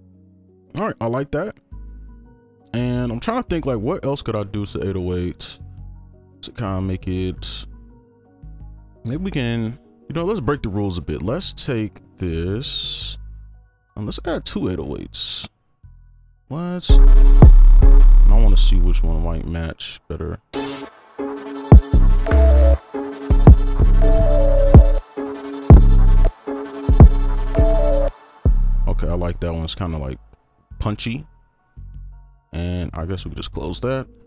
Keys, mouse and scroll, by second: 1.0 double click, 9.0 right click, 14.6-16.8 scroll down 1, 17.4 space, 17.8 space, 17.9 space, 20.5 space, 20.8 space, 21.1 space, 22.2 double click, 22.8 space, 22.9 space, 24.1 double click, 25.1 space, 26.2 space, 26.4 space, 28.0 space, 30.3-32.4 scroll up 1.